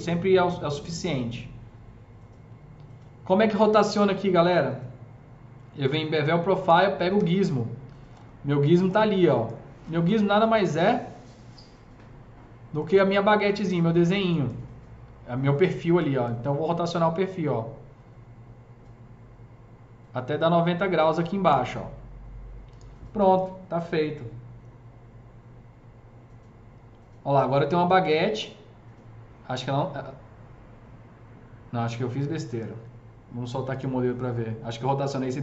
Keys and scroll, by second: 7.0 e.